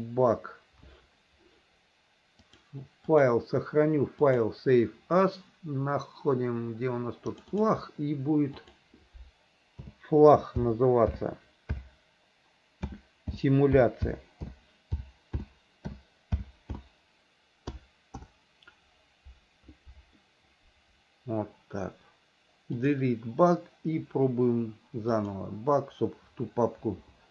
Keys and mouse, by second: 2.6 click, 3.3-4.8 drag, 23.0 click, 25.3-27.2 drag.